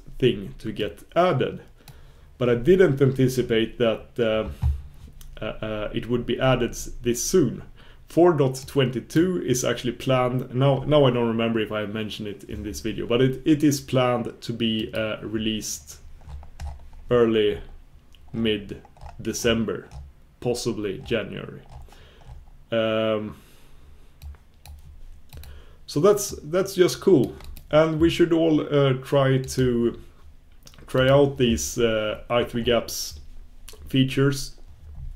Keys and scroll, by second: 34.9 super+b.